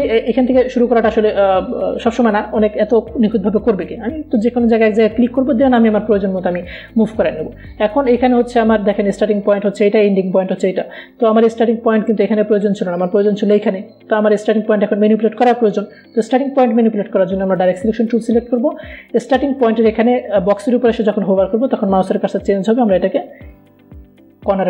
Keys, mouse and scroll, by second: 1.3 click, 3.2 ctrl+z, 6.6 click, 9.2 click, 19.0 click, 23.3-24.6 drag.